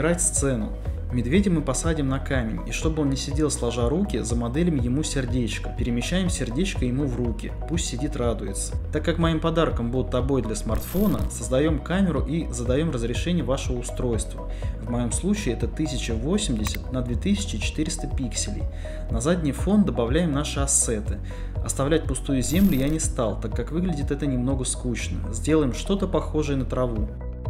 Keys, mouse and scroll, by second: 2.1 g, 3.1 click, 3.5-4.5 middle drag, 5.1 g, 5.7 Tab, 6.3 shift+middle click, 6.5 Tab, 6.9-9.5 typing, 7.7 KP_Enter, 7.9 middle click, 8.5 Escape, 9.7 middle click, 10.7 middle click, 11.7 click, 12.1 KP_0, 12.5 click, 13.7 click, 14.3-15.5 drag, 14.7 KP_0, 15.3 KP_0, 16.1 shift+middle click, 16.7 shift+middle click, 17.3 ctrl+shift+middle click, 17.9 ctrl+middle click, 18.9-20.5 shift+middle drag, 20.7-22.3 typing, 21.9 click, 22.3 click, 25.1 click, 25.9-27.3 typing, 26.5 click, 26.7 Tab.